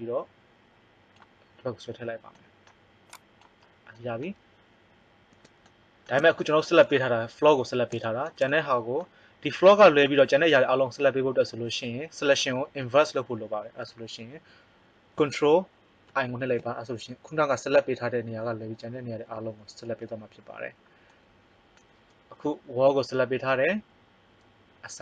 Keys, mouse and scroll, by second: 3.0-4.6 drag, 16.0 ctrl+i, 20.7 middle click.